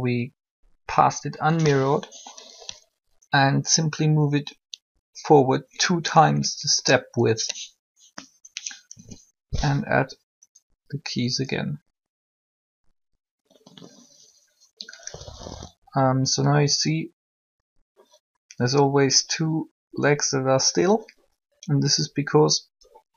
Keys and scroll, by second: 8.9 i.